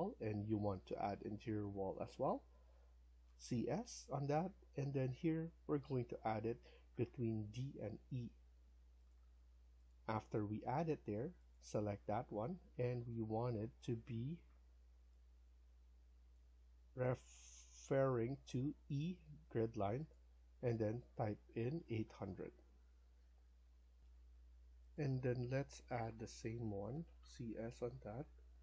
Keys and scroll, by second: 2.8-3.8 typing, 10.1 Escape, 10.3 Escape, 21.7 typing, 22.9 Return, 23.9 F1, 26.6-27.4 typing.